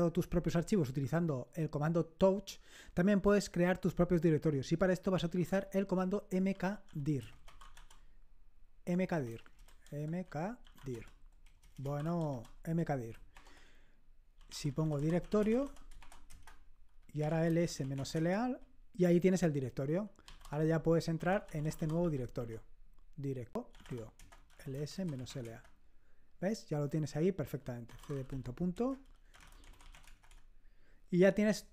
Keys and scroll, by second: 5.4-18.4 typing, 20.0-25.8 typing, 27.7-30.6 typing.